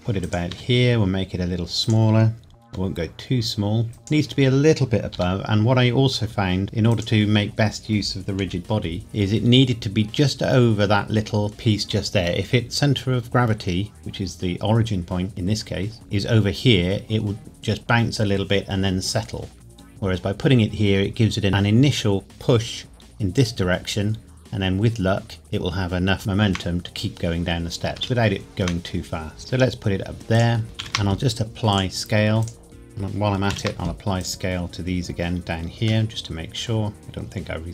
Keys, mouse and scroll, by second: 0.0 g, 0.2 click, 0.5 s, 1.8 click, 2.7 g, 3.9 click, 5.1 g, 6.9 click, 7.4-8.4 scroll up 1, 8.4 KP_Decimal, 9.0-9.7 scroll down 1, 24.1 scroll down 1, 25.1-26.1 scroll down 1, 26.2 shift+middle click, 28.0 shift+scroll down 1, 28.2 shift+middle click, 29.4 g, 30.3 click, 30.8 ctrl+a, 31.7 click, 33.5 ctrl+a, 34.2 click, 35.3 scroll down 1, 36.1 middle click.